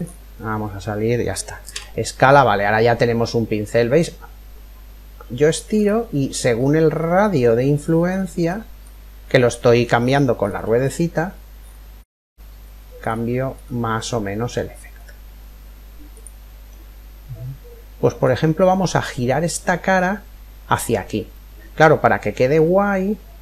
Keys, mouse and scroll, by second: 0.0-1.3 scroll up 1, 1.3 scroll up 1, 1.3 s, 1.5 middle click, 16.3-18.2 middle drag, 21.0-22.8 middle drag.